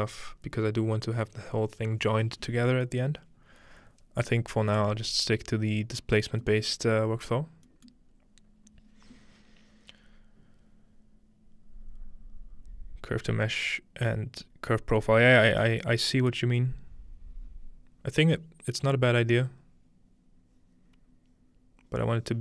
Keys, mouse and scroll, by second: 6.1-7.3 scroll down 2, 7.3 scroll up 2, 7.4 scroll down 2, 7.8-9.0 scroll up 2, 8.3-12.3 middle drag, 9.0-12.3 scroll up 1.